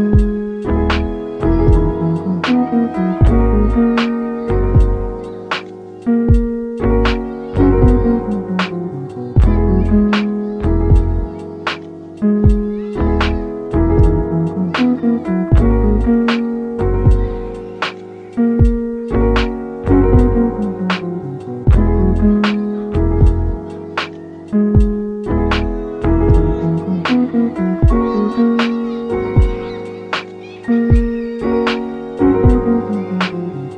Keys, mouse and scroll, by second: 2.1 g, 2.8 click, 3.3 shift+click, 3.9 shift+click, 4.4 shift+click, 5.0 shift+click, 5.6 s, 8.0 click, 8.6-9.1 scroll up 2, 9.2 click, 9.4 g, 10.2 double click, 10.3 click, 10.3 g, 10.5 double click, 11.0 double click, 11.1 click, 11.2 g, 11.6 click, 12.2 click, 12.3 g, 12.5 double click, 13.2 double click, 13.2 click, 13.3 g, 14.1 click, 14.4 double click, 14.5 click, 14.8 g, 15.5 click, 16.1 g, 16.5 double click, 17.1 g, 17.5 double click, 18.1 g, 18.5-20.2 drag, 20.2-20.6 scroll down 2, 20.6-21.7 shift+middle drag, 21.7-26.1 shift+drag, 26.1 shift+d, 27.1 click, 28.3 KP_1, 29.0 g, 29.3 z, 31.3 click, 32.9 g, 32.9 g.